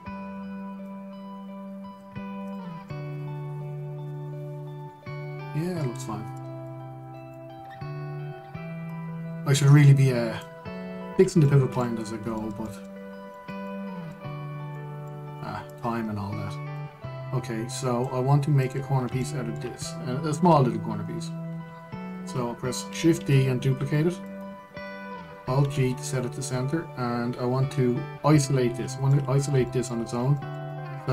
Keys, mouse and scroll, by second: 1.5 click, 3.1 click, 3.6-6.6 middle drag, 6.7-7.0 scroll down 1, 7.0-7.5 middle drag, 7.5 scroll down 1, 7.8-8.3 middle drag, 8.3 click, 9.6 click, 11.7-12.1 scroll down 1, 12.1 scroll up 2, 12.1-12.8 middle drag, 12.8 scroll down 1, 13.0-13.7 shift+middle drag, 13.7 scroll up 1, 14.0-16.3 shift+middle drag, 16.3 click, 17.4 click, 19.3 click, 19.6-19.9 scroll down 1, 19.9-23.9 shift+middle drag, 23.9 shift+d, 26.3 alt+g, 27.0-29.0 scroll up 1, 29.8-31.1 middle drag.